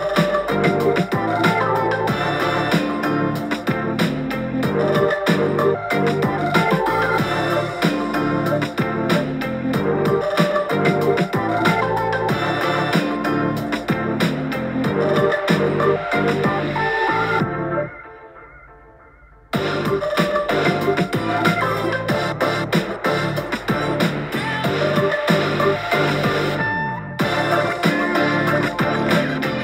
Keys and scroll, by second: 1.5 BackSpace, 13.5 super+j, 13.7 super+j, 14.7 super+t, 17.4 super+t, 19.1 p, 20.6 super+t, 21.3 super+t, 22.3 super+t, 25.1 scroll down 1, 25.4 scroll up 1, 26.9 BackSpace.